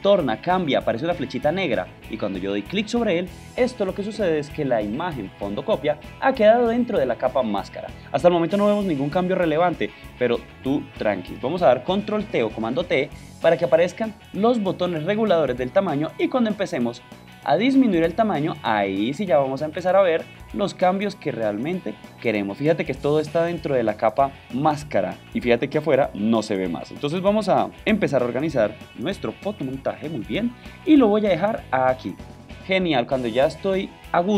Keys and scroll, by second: 13.3 super+t.